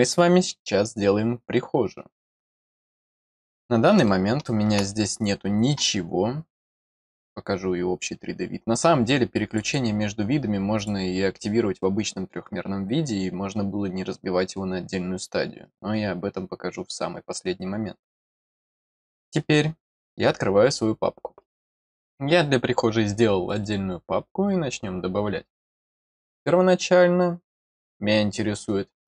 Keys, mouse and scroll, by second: 2.6 click, 3.3 scroll down 1, 4.0 middle click, 6.9 click, 7.1 click, 9.3 click, 9.6 click, 10.7 click, 23.4 click, 23.6 click.